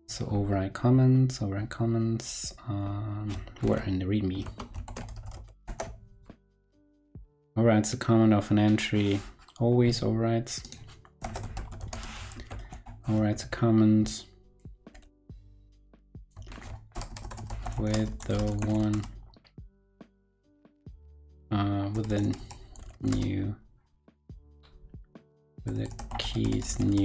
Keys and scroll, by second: 3.6 shift+super+p, 4.8 shift+super+o, 13.3 super+Right, 16.4 shift+super+Right.